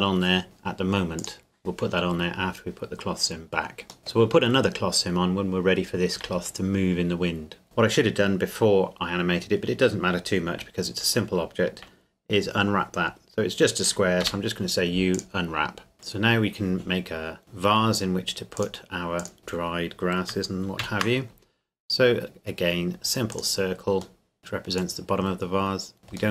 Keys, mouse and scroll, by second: 1.2 click, 3.0 scroll up 1, 4.0 middle click, 7.6 Tab, 14.2 u, 15.1 click, 18.6 click, 19.4 KP_7, 20.8 shift+a, 23.3 click, 24.2 middle click, 24.4 click.